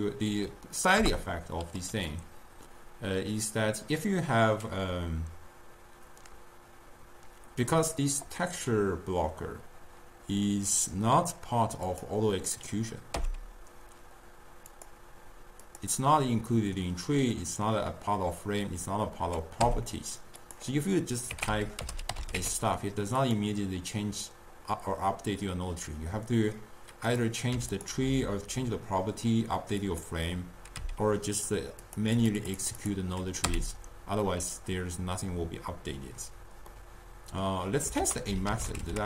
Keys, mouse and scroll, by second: 1.0 Return, 11.9 click, 13.2 n, 14.8 click, 15.8-18.7 drag, 19.7 n, 20.5 click, 21.5-22.2 typing, 23.2 click, 27.1 click, 29.9 click, 30.8 n, 31.9 click, 33.5 n, 36.7-38.0 middle drag, 38.0 ctrl+a.